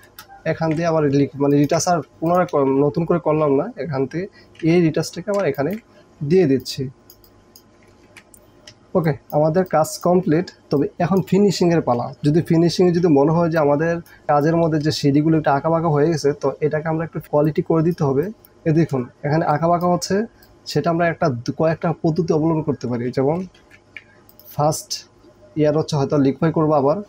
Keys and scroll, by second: 0.1 Return, 4.7 b, 8.1 ctrl+d, 8.7 ctrl+space, 9.6 ctrl+space, 13.3 space, 18.4 ctrl+j, 23.6 ctrl+e.